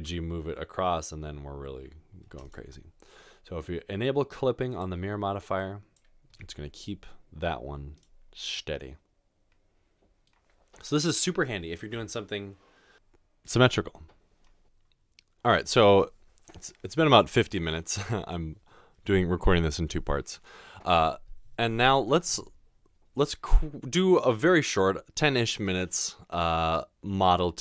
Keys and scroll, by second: 0.0 g, 6.5 g.